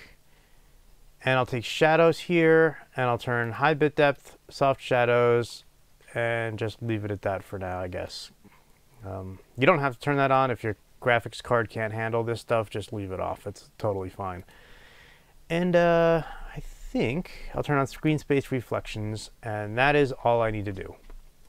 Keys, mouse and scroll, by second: 4.1 click.